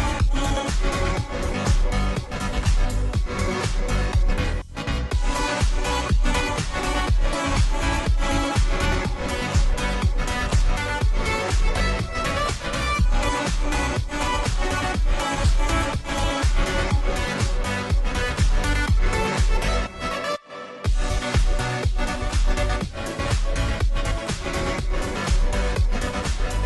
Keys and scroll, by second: 8.3-9.3 typing, 13.7-14.5 typing.